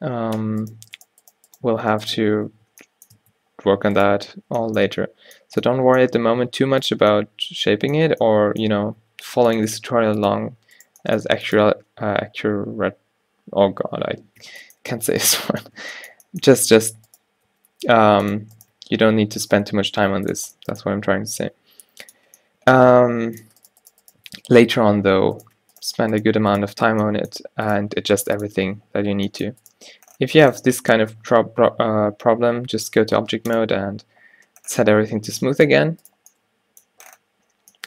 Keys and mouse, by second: 0.4 f, 2.3 click, 2.3 f, 2.6 Tab, 3.3 Tab, 6.3 g, 9.1 g, 9.9 g, 11.0 g, 12.7-14.2 middle drag, 14.7-17.0 middle drag, 17.2-21.0 drag, 17.6 g, 18.9 e, 21.0 g, 23.0 g, 24.4 g, 25.2 f, 27.0 f, 27.9 g, 28.7 Tab, 33.6-37.8 drag, 35.9 a.